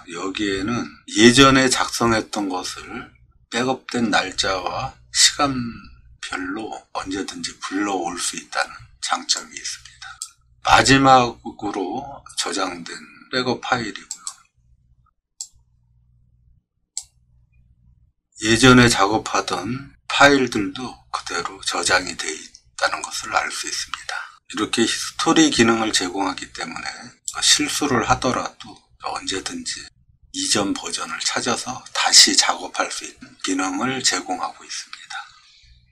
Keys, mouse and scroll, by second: 0.1 scroll down 4, 0.9 middle click, 0.9 scroll down 1, 9.4 click, 14.1 click, 15.4-17.0 drag, 17.5 scroll down 1, 27.2 click.